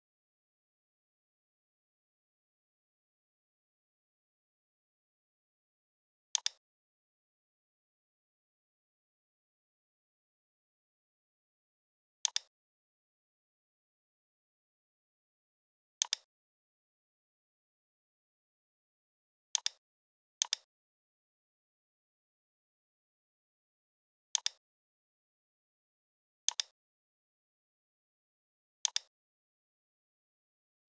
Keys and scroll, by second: 0.9 x, 1.8 >.